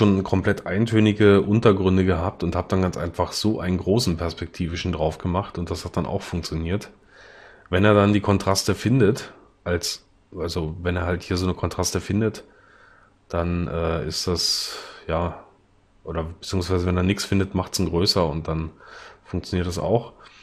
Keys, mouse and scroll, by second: 1.3 l.